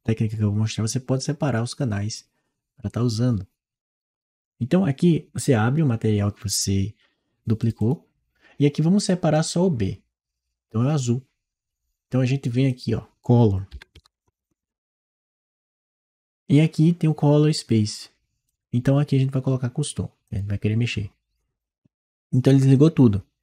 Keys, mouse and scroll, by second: 7.4 click, 12.4-13.6 drag, 13.6 c, 14.5 r, 18.3 click, 20.1 click.